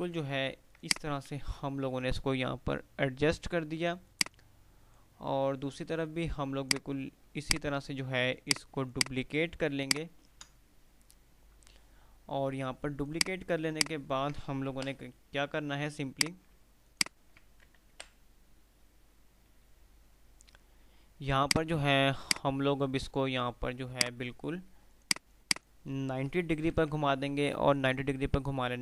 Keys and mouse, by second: 0.0-0.7 typing, 0.9 click, 1.4 F3, 3.6 F2, 6.6 click, 9.9-13.0 ctrl+right drag, 13.3 click, 14.0 alt+click, 15.0 Delete, 16.3 click, 17.0 alt+click, 18.2 Delete, 20.0 typing, 21.6-26.0 drag.